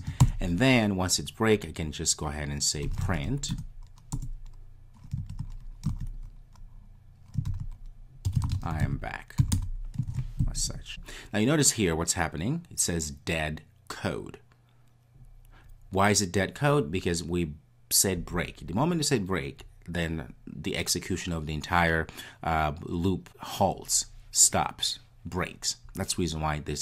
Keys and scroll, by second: 1.9 Return, 3.5 Return.